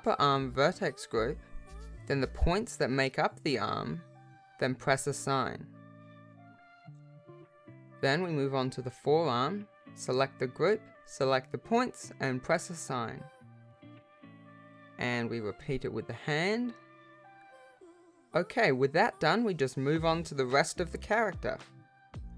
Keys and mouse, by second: 0.1 click, 8.2 click, 9.5 alt+a, 12.5 shift+click, 13.3 click, 13.7 shift+click, 17.8 click, 18.7 r, 18.8 click, 19.0 r, 19.6 click, 19.8 r, 22.0 ctrl+Tab.